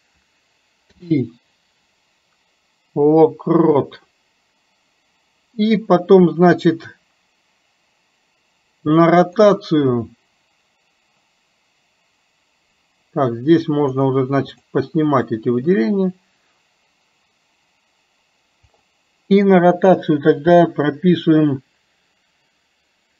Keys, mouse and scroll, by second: 9.4-13.7 drag, 14.0 click, 14.6 click, 15.2 click, 18.9-23.1 drag.